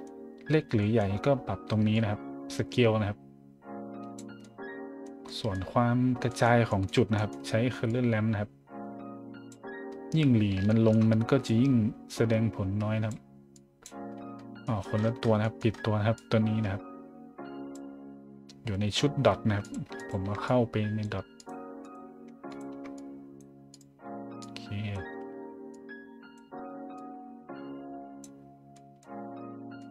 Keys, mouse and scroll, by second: 0.5 scroll down 1, 0.7 middle drag, 1.9-4.1 drag, 4.4 middle click, 5.2 middle drag, 6.0 middle click, 6.3 middle drag, 6.7-7.7 scroll up 3, 7.9-9.5 drag, 9.8-10.5 middle drag, 10.7 shift+middle drag, 11.4-13.1 drag, 13.5-13.8 drag, 14.0 scroll down 1, 14.3-15.8 scroll up 5, 16.1 click, 19.6 click, 20.0 shift+click, 20.4-21.0 drag, 21.4 click, 21.8 click, 22.5 shift+click, 22.9-23.4 drag, 23.7 click, 24.4-24.9 drag, 25.7 click, 26.9 click, 28.5 scroll up 1, 28.7 middle drag, 29.8 middle drag.